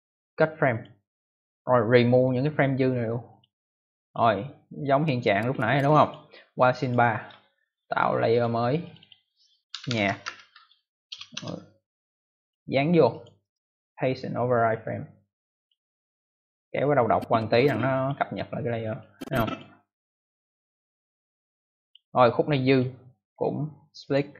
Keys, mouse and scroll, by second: 0.6 click, 1.9 right click, 3.2 click, 4.0 click, 5.1 click, 6.7 click, 6.8 click, 8.2 click, 8.7 click, 8.9 click, 9.0 double click, 9.4-11.0 typing, 11.3 Return, 12.3 click, 13.0 click, 13.3 right click, 15.5 click, 17.0 click, 18.9 click, 20.3 click, 22.6 click, 22.7 click, 23.1 right click, 24.0 click.